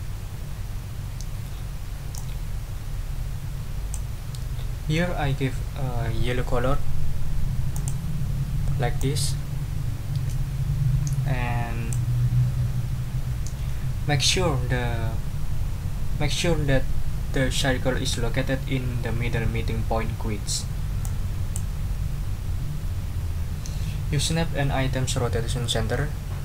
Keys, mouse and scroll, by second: 2.1-4.1 drag, 7.7 click, 9.0-12.1 drag, 21.0 click.